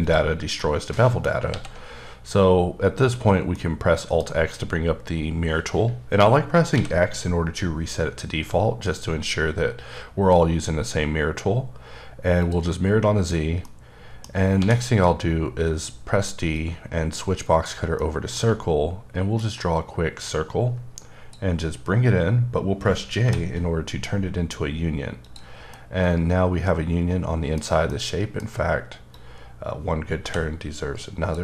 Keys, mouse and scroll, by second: 0.6 middle click, 1.5 alt+x, 3.5 middle click, 6.7 x, 12.4 click, 13.6 middle click, 14.5 d, 16.5 click, 18.0 middle click, 19.4 ctrl+click, 23.2 j, 25.2 click, 25.7 middle click, 27.9 middle click, 29.1 click, 30.2 j.